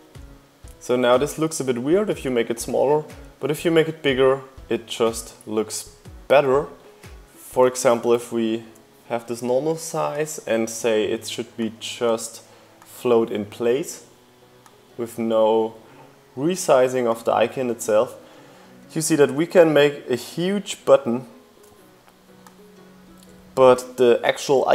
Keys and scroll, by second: 5.5 super+z.